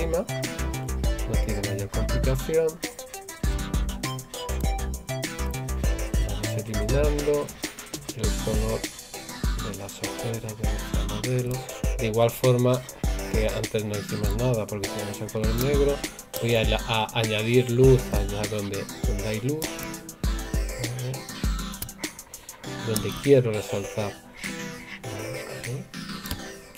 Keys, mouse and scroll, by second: 4.5 right click, 11.4 right click, 14.1 right click, 16.4 right click, 19.7 right click, 23.1 right click.